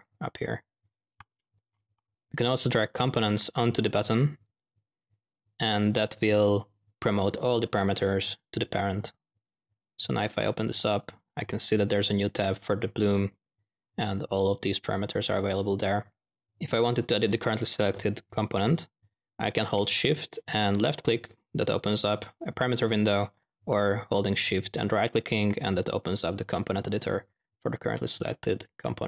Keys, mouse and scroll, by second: 1.2 click, 1.9-2.6 typing, 2.9-4.4 drag, 4.4-5.5 typing, 8.8-9.2 drag, 10.0-10.6 drag, 12.4 click, 20.7 shift+click, 26.0-26.4 drag.